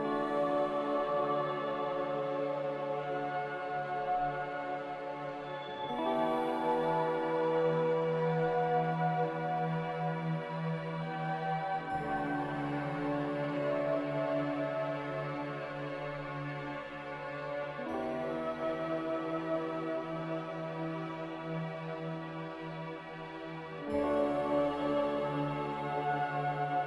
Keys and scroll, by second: 11.1 b, 16.5 typing, 17.0 Return, 23.4-24.2 typing, 26.5-26.8 typing.